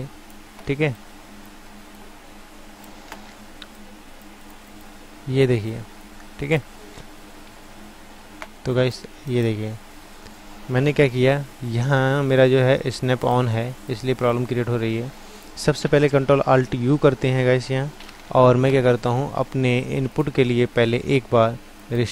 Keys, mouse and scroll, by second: 1.3 click, 1.9-3.8 middle drag, 3.8-5.6 drag, 5.8-7.0 drag, 7.0 ctrl+z, 7.5 ctrl+z, 8.7 click, 13.2-18.0 drag, 18.0 ctrl+alt+u, 18.3 ctrl+alt+w.